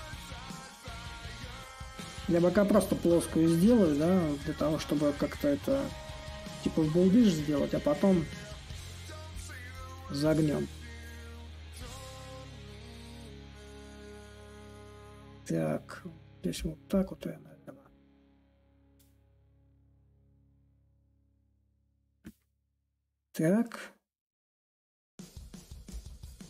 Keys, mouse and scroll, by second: 5.7-10.8 drag, 10.8-15.9 drag, 16.3-17.4 drag, 17.5-23.8 alt+drag, 25.6-26.4 drag.